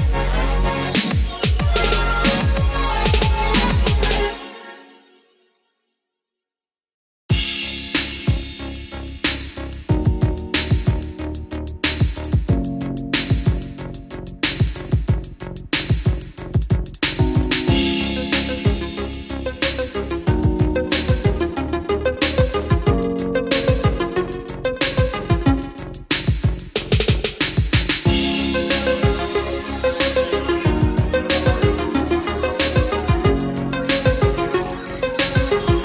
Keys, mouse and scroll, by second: 2.5 click, 4.9-5.5 scroll down 1, 5.6-10.3 drag, 11.1 Up, 14.7-23.5 drag, 26.2 KP_2, 27.9-33.2 drag.